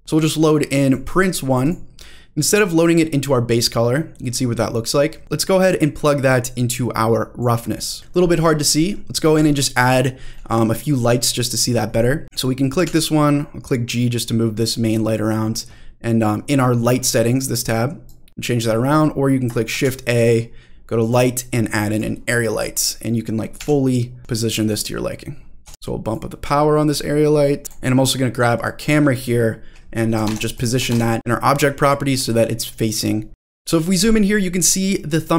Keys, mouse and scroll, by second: 3.1 scroll up 1, 3.4-4.2 middle drag, 4.4-4.8 scroll down 2, 4.7 middle click, 5.2-6.3 drag, 6.3-7.4 middle drag, 8.0-8.8 scroll down 3, 8.8 middle click, 9.3 drag, 9.8-10.3 scroll down 2, 10.3 middle drag, 12.2 click, 12.8 g, 14.6 click, 14.8-15.4 middle drag, 18.1 click, 18.6 middle click, 19.7 shift+a, 22.3 middle drag, 22.8-23.3 middle drag, 23.6 g, 24.2 click, 24.7 click, 25.2-25.6 scroll up 1, 25.6 s, 25.8 shift+middle click, 26.1-27.7 drag, 27.6 middle click, 27.6 shift+scroll down 2, 29.2-30.3 drag, 30.5 click, 32.2 middle click, 32.9 click, 33.3 scroll down 2, 33.4-33.7 scroll down 1, 33.7-34.7 scroll up 3, 34.7-35.2 scroll down 2.